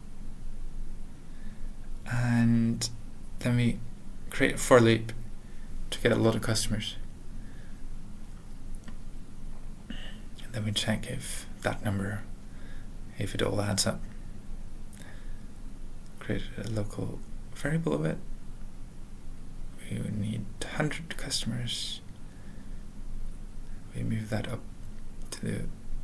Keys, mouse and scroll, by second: 0.6 alt+space, 2.0 ctrl+p, 2.0 ctrl+e, 2.5 ctrl+a, 3.1 ctrl+l, 3.5 ctrl+p, 3.7 ctrl+e, 4.1 Return, 4.9 Return, 4.9 Tab, 4.9 typing, 5.4 Tab, 5.9 Tab, 6.8-9.5 typing, 9.5 Tab, 10.9 Tab, 11.9 ctrl+p, 12.1 ctrl+e, 12.3 alt+b, 13.0 alt+Return, 14.3-20.3 typing, 15.9 alt+., 17.2 alt+f, 17.9 alt+b, 18.0 alt+f, 21.0 ctrl+n, 21.3 ctrl+n, 21.3 ctrl+e, 21.5 ctrl+a, 21.7 ctrl+space, 21.7 ctrl+n, 22.1 ctrl+n, 23.2 ctrl+w, 23.2 ctrl+p, 23.5 ctrl+p, 23.7 ctrl+y, 23.7 ctrl+alt+\, 25.6 ctrl+p, 25.6 ctrl+e.